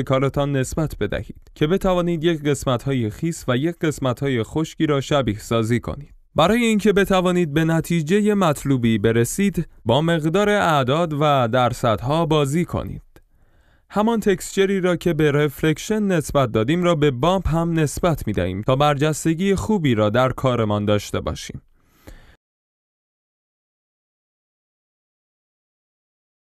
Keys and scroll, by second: 18.2 F11, 25.0 4, 25.1 Return, 26.1 4, 26.2 Return.